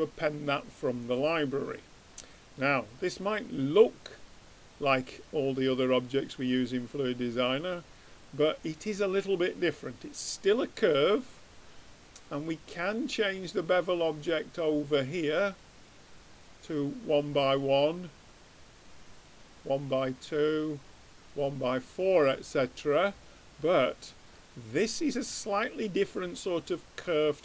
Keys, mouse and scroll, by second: 0.0-1.8 drag, 1.8 middle click, 3.8-5.0 drag, 5.6-8.2 middle drag, 14.2-17.2 drag, 17.8-19.6 drag, 20.3-22.1 drag, 23.6-27.4 middle drag.